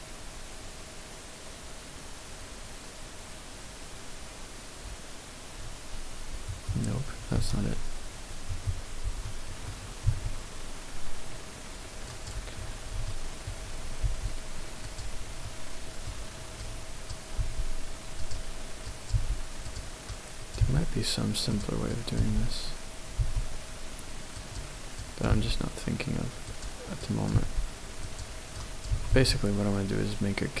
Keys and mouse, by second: 7.3 x, 9.2 middle click, 10.2 s, 12.2 click, 13.0 shift+click, 14.1 r, 14.8 click, 15.9 middle click, 16.7 click, 17.5 g, 18.3 click, 18.9 click, 19.2 g, 19.7 click, 20.0 click, 20.6 g, 21.9 click, 23.2 g, 24.4 click, 25.0 click, 25.3 g, 26.6 click, 27.0 click, 27.4 g, 28.1 click, 28.5 click, 28.9 g, 29.2 z.